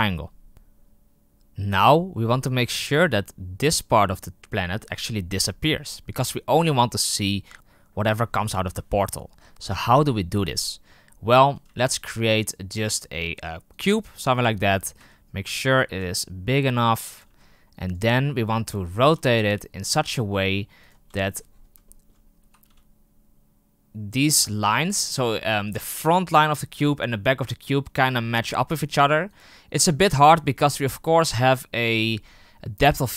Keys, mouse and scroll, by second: 6.5 right click, 13.7 shift+a, 15.0 g, 15.8 s, 17.2 g, 18.2-18.7 scroll up 5, 18.7-19.3 shift+middle drag, 19.3 r, 20.1 g, 21.1-21.4 shift+middle drag, 21.4-21.8 scroll up 5, 21.8-22.4 shift+middle drag, 22.4 r, 24.6 g, 28.5 g, 30.5-31.2 scroll down 11.